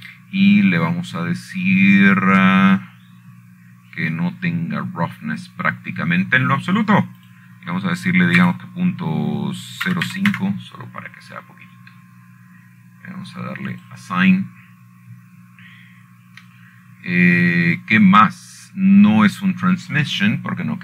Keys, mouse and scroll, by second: 0.0-1.1 drag, 1.2 click, 2.7 scroll up 1, 2.9-3.2 scroll down 5, 3.3 scroll up 2, 3.4-4.3 scroll down 7, 5.8 scroll down 1, 9.9 click, 12.6 KP_0, 13.0 KP_5, 13.0 Return, 14.5-15.5 scroll up 5, 16.5 click, 17.4-19.1 scroll down 13, 19.7-20.1 scroll up 4.